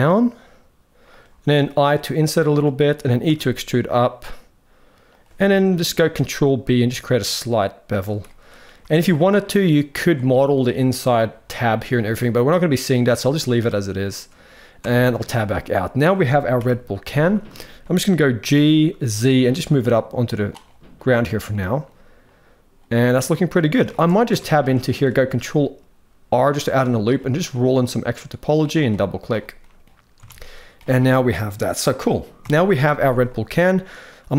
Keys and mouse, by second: 1.7 i, 3.1 e, 5.7 ctrl+b, 8.2 middle click, 10.3 click, 10.6 middle click, 11.6-12.7 middle drag, 14.7 Tab, 15.2 shift+middle drag, 16.3 KP_1, 17.3 shift+middle drag, 18.1 g, 21.3-21.6 shift+middle drag, 22.6-23.5 middle drag, 23.6 shift+middle drag, 24.0 Tab, 24.4 middle click, 25.0 ctrl+r, 29.3 middle click, 30.0 Tab, 32.1 KP_1.